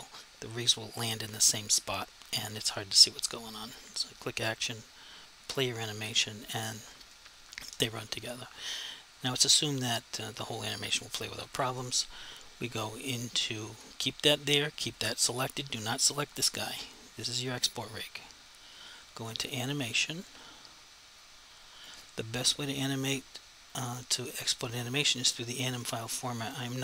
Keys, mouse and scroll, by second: 3.5 click, 10.4 click, 19.5 click, 21.3 click.